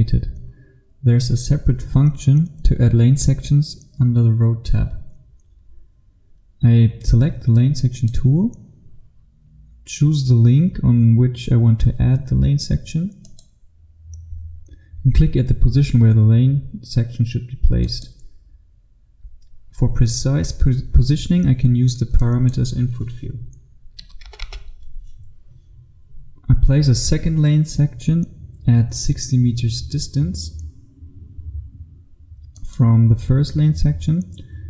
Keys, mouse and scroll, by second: 7.6 click, 11.9-13.3 scroll up 1, 13.3 click, 15.8 click, 16.5-17.9 scroll up 1, 17.9 click, 20.9 click, 24.0 KP_3, 24.3 KP_0, 32.7 click.